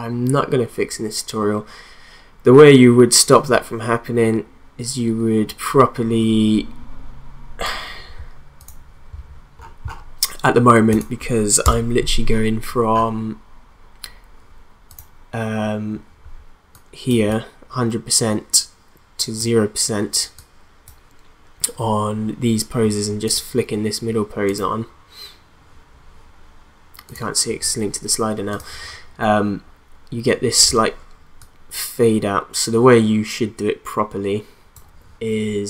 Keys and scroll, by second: 11.6 BackSpace.